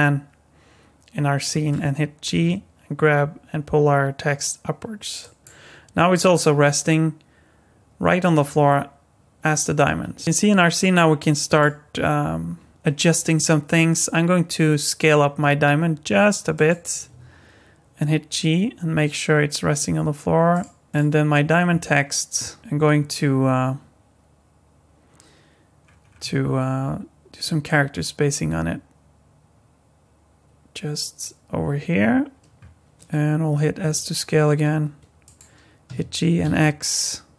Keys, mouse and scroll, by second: 2.3 g, 8.2-10.2 scroll down 6, 11.4 click, 13.7 s, 17.1 g, 20.9 click, 25.8-27.6 scroll down 6, 27.6 click, 33.8 s, 35.9 g.